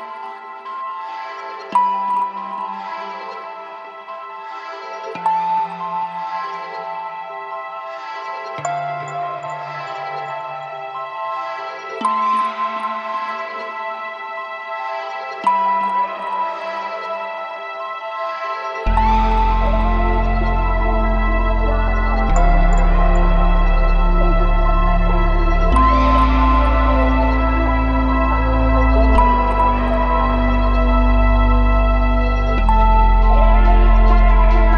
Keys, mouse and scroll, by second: 0.1 click, 1.1-3.0 drag, 3.8 click, 3.9 click, 5.2 space, 7.6 click, 11.5 space, 12.4 click, 13.3-13.7 scroll down 1, 13.8-14.3 shift+middle drag, 15.2 click, 15.5 space, 19.0 space, 20.0 click, 20.7 click, 21.2 click, 22.2 click, 23.2 space, 24.1-25.2 drag, 25.5-26.8 scroll up 3, 27.3-28.4 drag, 30.0 n, 30.4-32.4 scroll down 6, 32.4 Home.